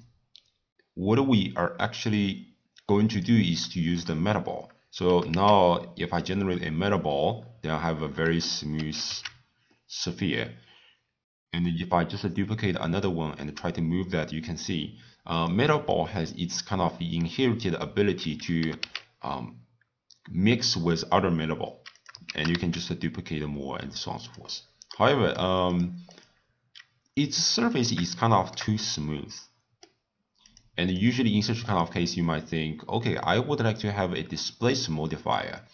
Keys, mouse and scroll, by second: 5.0 g, 8.7 shift+d, 15.9-18.5 middle drag, 18.5 g, 22.2 shift+d, 24.9-25.7 middle drag, 25.7 click, 26.1 click, 27.7 click, 28.2-30.4 shift+middle drag, 30.4 click, 30.9 click, 31.6 click.